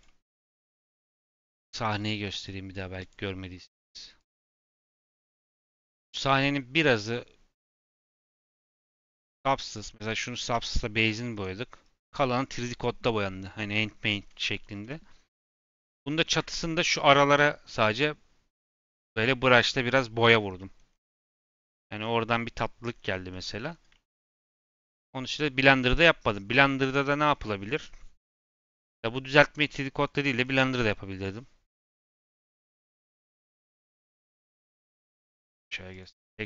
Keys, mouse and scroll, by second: 0.0 middle click, 0.4-2.3 scroll down 2, 2.3 click, 3.0 click, 4.1 click, 4.6 click, 5.3 z, 5.7-6.2 middle drag, 6.2-7.5 scroll down 1, 7.5 click, 8.0-8.8 scroll down 2, 9.6 click, 9.9-10.6 scroll up 5, 10.6 shift+middle click, 10.9 g, 15.5 KP_Decimal, 16.0 middle click, 16.3 KP_Decimal, 16.6-17.6 scroll up 3, 17.6-18.5 scroll up 1, 18.5-18.9 scroll down 3, 18.9-20.2 middle drag, 20.2 scroll down 4, 20.5 middle click, 20.9 scroll down 3, 21.1 middle click, 21.9-22.6 scroll up 6, 22.8-23.3 scroll down 3, 23.3 middle click, 23.6 scroll down 2, 23.9 shift+middle click, 24.6-25.5 scroll down 3, 25.5 middle click, 26.3 scroll up 2, 26.6 middle click, 26.8 scroll down 1, 28.6-29.5 scroll up 5, 29.5 click, 30.0-30.4 scroll up 3, 30.4 scroll down 5, 30.8-33.9 middle drag, 34.2-34.5 scroll up 2, 34.5 click, 36.0 click, 36.4 scroll up 2.